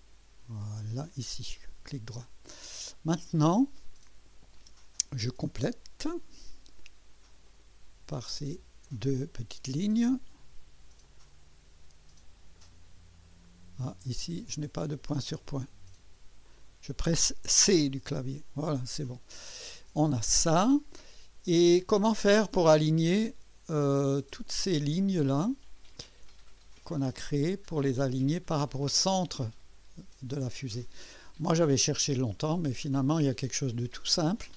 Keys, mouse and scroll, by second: 0.6 click, 1.6 right click, 2.7 right click, 3.5 scroll up 2, 6.0 click, 7.4 click, 8.8 click, 11.0 click, 12.5 click, 13.4 right click, 15.5 click, 16.5 click, 17.9 c, 22.6-24.5 drag, 25.3-26.3 drag, 28.1-30.2 drag, 31.9 right click, 33.0 click.